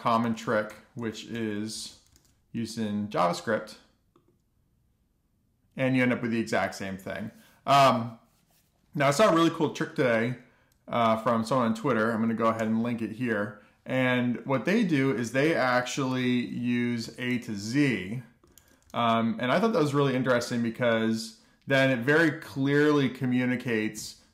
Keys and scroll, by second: 1.6 BackSpace, 1.9 BackSpace, 2.2 Delete, 2.6 Right, 2.8 Right, 3.0 BackSpace, 3.4 Left, 3.7 _, 4.1 alt+shift+f, 4.5 super+s, 14.9 BackSpace, 17.1 super+z, 18.4 F2, 18.6-19.6 typing, 20.8 alt+shift+f, 21.1 super+s.